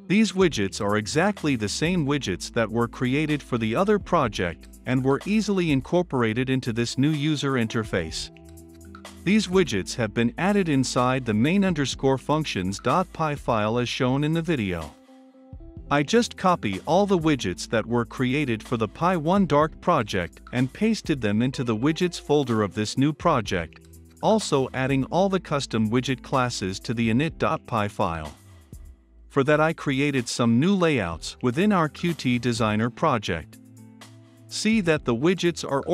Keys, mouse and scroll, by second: 0.0-14.3 drag, 14.3 middle click, 15.0-25.5 drag, 25.7 ctrl+F5, 28.3-35.9 drag.